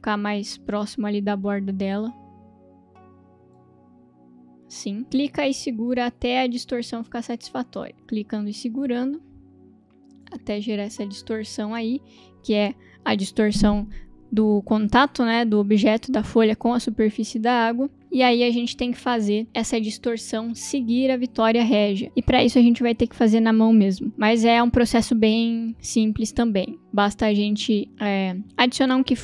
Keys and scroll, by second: 7.9 ctrl+z, 18.0 v.